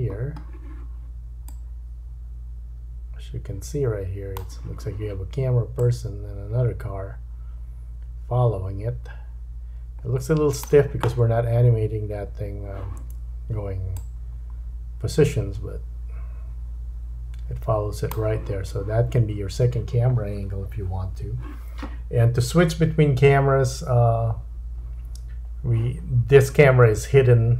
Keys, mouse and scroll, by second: 5.8 click, 14.0 click.